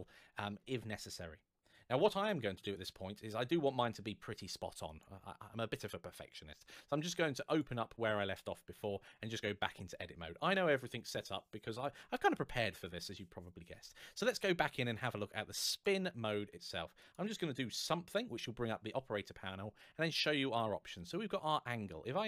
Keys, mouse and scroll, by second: 2.6 click, 7.3 click, 8.5 Tab, 9.1 a, 14.1-14.7 scroll down 1, 15.6 click, 17.5 middle click, 21.2 click.